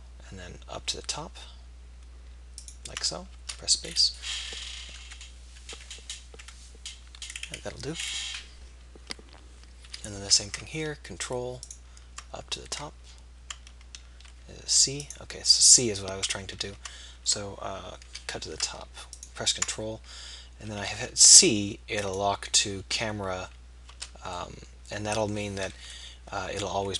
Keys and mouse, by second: 3.8-4.8 middle drag, 9.9 k, 16.4 ctrl+z, 18.1 k, 26.0 KP_1.